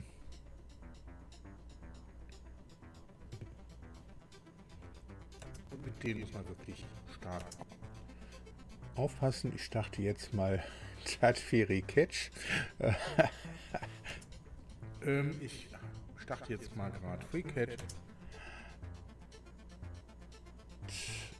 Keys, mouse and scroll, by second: 2.5 click, 3.1 click, 4.1 click, 6.0 space, 7.9 click, 13.6 click, 14.1 space.